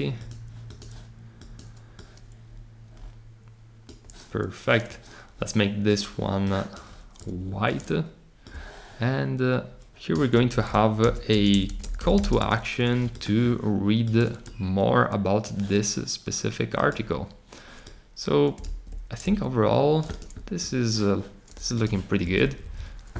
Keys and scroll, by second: 10.5 Return, 10.7-12.6 typing, 18.6 super+z, 22.4 Up, 22.6 Up.